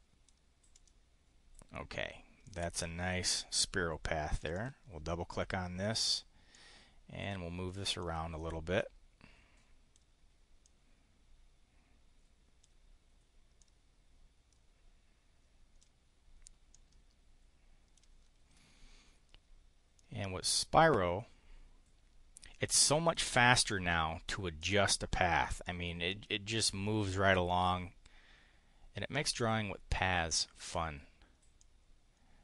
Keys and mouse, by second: 0.7 click, 2.4 click, 2.7 click, 4.4 click, 6.5-7.6 drag, 17.6 click, 19.9-23.3 drag, 24.6-27.8 drag, 29.4-30.7 drag, 31.6-32.4 drag.